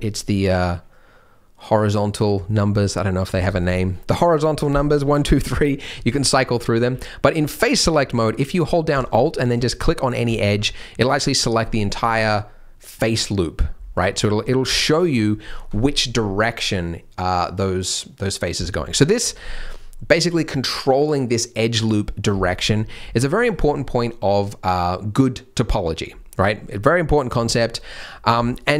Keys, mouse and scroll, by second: 5.0-6.9 typing, 7.4-7.7 scroll up 2, 7.7 middle click, 7.9-8.9 scroll down 5, 9.2 scroll up 3, 10.2 alt+click, 10.6 scroll down 2, 14.0-14.4 scroll up 3, 14.4 middle click, 14.6 scroll down 1, 15.1 scroll down 3, 18.9 middle click, 22.7-23.1 scroll up 3, 23.1 middle click, 26.4-27.6 scroll up 1, 27.6-27.9 scroll down 2, 27.8 middle click, 28.2 scroll up 1, 28.5 alt+click.